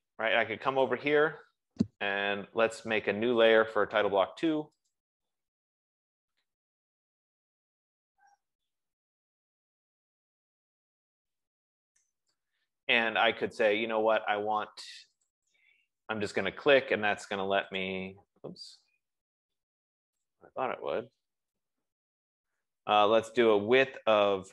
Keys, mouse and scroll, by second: 1.3 click, 4.1 click, 5.4 click, 6.9-12.3 typing, 9.3 Caps_Lock, 13.4 F15, 13.4 typing, 15.8 click, 18.2 click, 20.5 click.